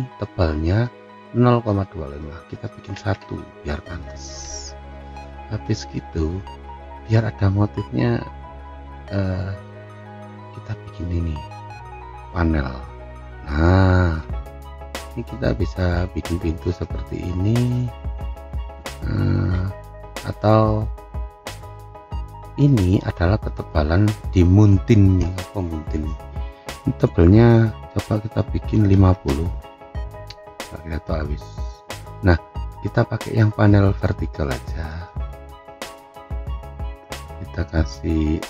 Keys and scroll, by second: 2.9 1, 4.3 Return, 29.2 Return.